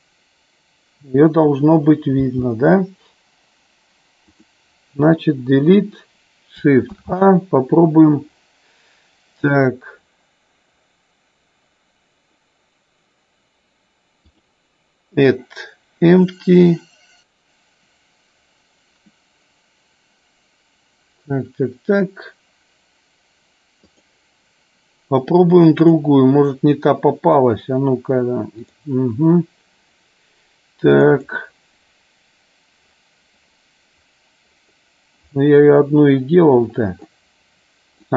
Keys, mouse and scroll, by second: 2.2 g, 4.4-5.5 drag, 5.5 Delete, 14.1-24.3 drag.